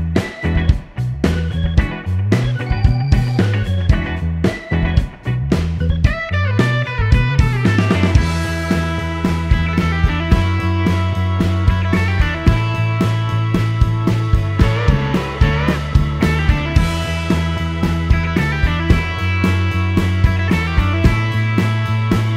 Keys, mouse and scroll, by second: 0.4 click, 0.7 right click, 2.6 click, 4.3 click, 7.0 n, 8.8 click, 10.0 click, 10.8 c, 12.3 click, 13.5 shift+r, 15.1-16.0 typing, 17.5 Return, 20.2-22.3 drag.